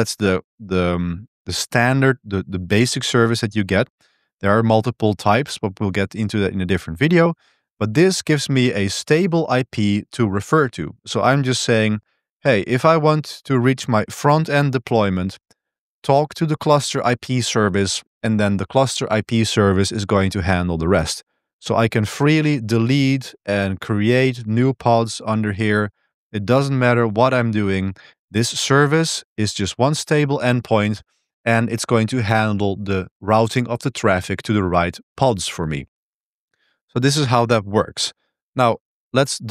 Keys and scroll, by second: 37.1-37.9 typing, 38.1 super+1.